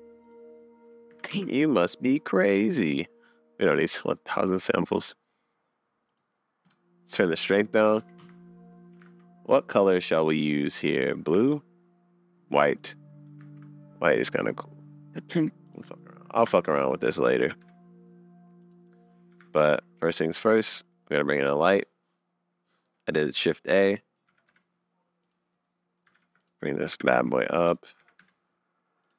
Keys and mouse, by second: 0.2-1.3 drag, 6.1 click, 7.1-8.2 drag, 9.1 super+s, 9.7 click, 9.9 middle click, 10.9 middle click, 11.4 super+s, 12.8 click, 13.4 shift+a, 15.9-16.3 drag, 16.4 g, 17.1 click, 17.4 g, 19.3 g, 20.8 middle click, 23.5 middle click, 25.3 g, 25.7 click, 26.1 g, 26.7 click, 26.9 g, 28.0 r.